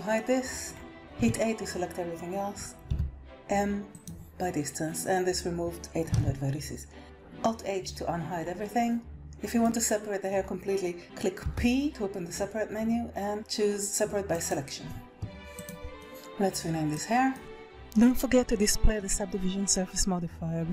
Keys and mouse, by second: 1.0 a, 2.8 m, 6.1 alt+a, 7.0 alt+h, 9.2 middle click, 11.4 p, 15.4 click, 15.9-17.0 drag, 17.0 BackSpace.